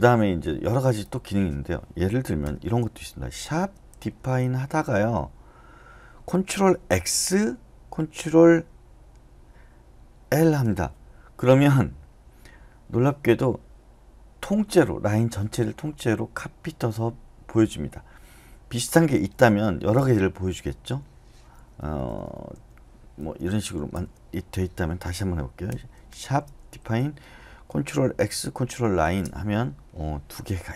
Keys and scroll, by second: 2.4 Return, 3.4-5.0 typing, 7.1 ctrl+x, 10.3 ctrl+l, 19.9 BackSpace, 20.8 3, 21.8 Left, 22.0 Left, 22.2 Left, 22.5 2, 23.2 Left, 24.3 Escape, 25.7-27.3 typing, 28.3 ctrl+x, 29.0 ctrl+l.